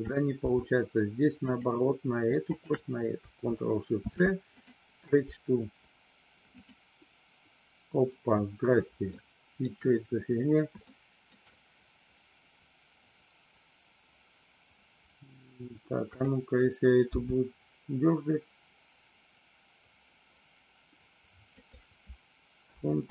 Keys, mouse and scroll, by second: 1.3 click, 3.9 ctrl+shift+c, 6.7 click, 9.2 shift+middle click, 10.8 shift+middle click, 16.0 click, 17.0 g, 21.6 click.